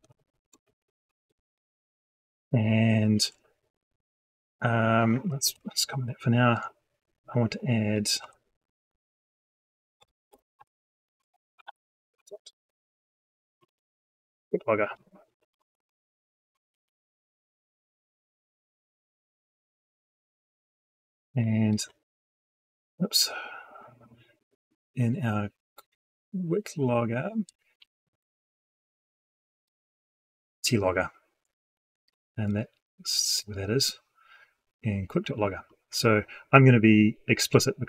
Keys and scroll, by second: 5.4 ctrl+/, 27.9 ctrl+End, 30.0 ctrl+c.